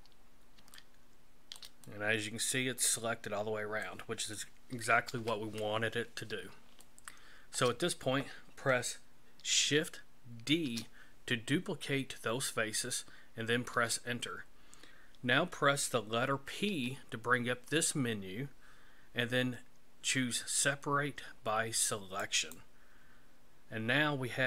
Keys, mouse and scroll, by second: 0.8 shift+middle click, 1.8 middle click, 5.1 KP_1, 6.8 shift+middle click, 10.5 shift+d, 16.7 p.